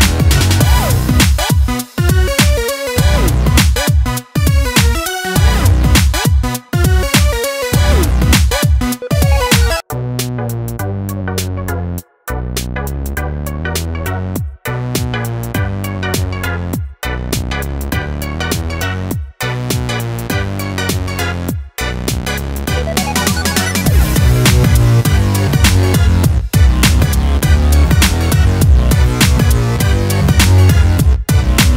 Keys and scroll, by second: 9.2 ctrl+Return, 15.6 ctrl+j.